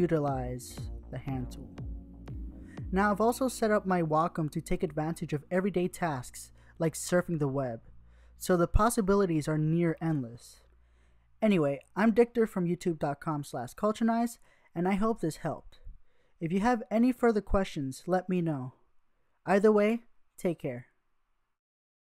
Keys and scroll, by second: 10.6 Tab, 13.6-15.3 typing, 16.9-18.0 typing.